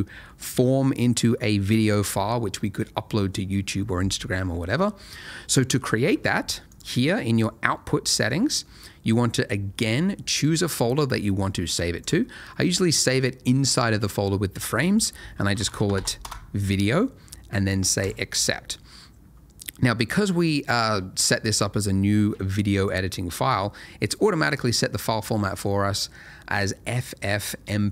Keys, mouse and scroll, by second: 2.1 space, 6.7 click, 7.7 middle click, 10.4 click, 15.4 v, 15.5 i, 15.8 e, 15.8 d, 16.2 Return, 18.0 click, 24.1 middle click.